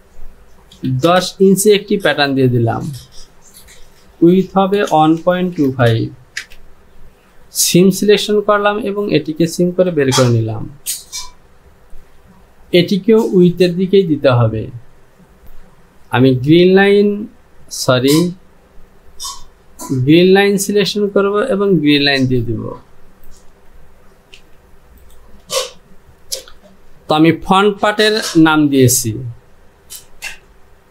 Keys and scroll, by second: 0.8 KP_1, 1.1 KP_0, 3.4 Down, 4.8-6.5 typing, 11.9 Home, 24.4 j.